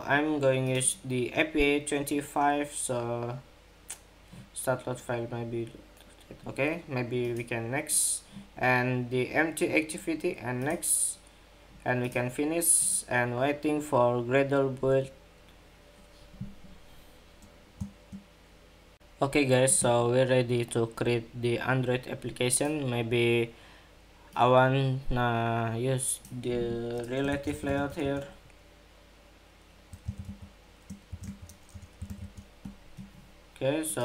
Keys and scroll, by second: 18.9 shift+super+2.